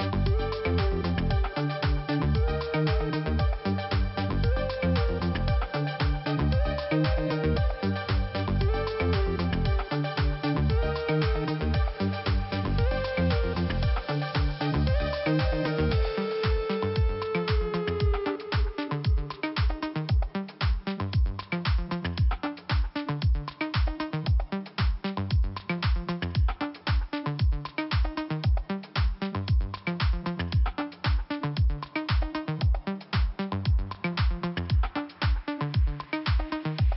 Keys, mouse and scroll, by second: 0.4 click, 0.5 click, 0.7 click, 0.8 double click, 1.2 double click, 3.1 click, 5.8 click, 5.9 click, 6.8 click, 8.7 click, 9.7 click, 10.6 scroll up 2, 11.5 click, 13.2 click, 14.9 click, 15.0 click, 16.7 click, 17.8 click, 19.8 click, 20.9 scroll down 2, 22.8 click, 24.3 click, 24.4 click, 25.3 click, 27.3 click, 29.5 click, 32.1 click, 33.7 click, 36.3 click.